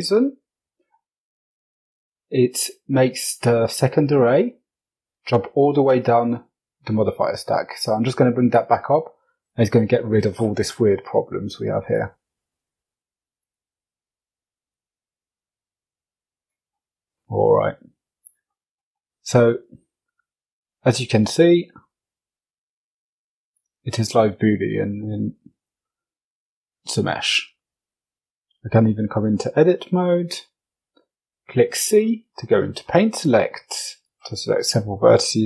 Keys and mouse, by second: 7.3 click, 10.8-11.3 drag, 12.6 click, 13.9 click, 16.1-17.6 middle drag, 18.8 g, 23.1-23.8 middle drag, 24.8 shift+middle drag, 25.9 middle drag, 26.7 Tab, 27.8 click, 28.2 shift+middle click, 29.0 middle click, 29.9 c, 34.0 middle click.